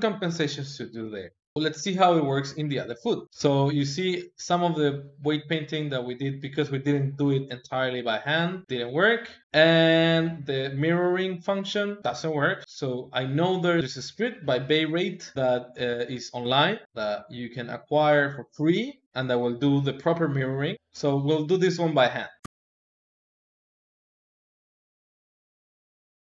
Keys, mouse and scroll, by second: 1.5-3.2 middle drag, 3.2 alt+h, 3.9 r, 22.9 ctrl+middle click, 23.3 click, 23.5 middle click, 23.7 click, 23.7 KP_3, 24.1 r, 24.3 click, 24.8 shift+click, 25.0 ctrl+Tab, 25.1 ctrl+Tab, 25.4 ctrl+Tab, 25.6 shift+middle click.